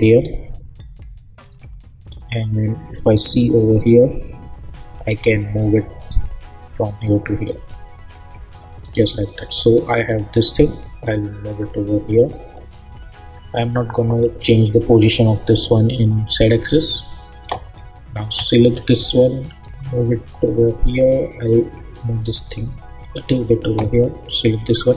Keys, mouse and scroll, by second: 0.2-2.0 scroll down 1, 3.8-9.4 drag, 10.0-10.7 scroll up 1, 11.5-14.9 drag, 16.8-18.8 scroll up 1, 19.0-24.5 drag.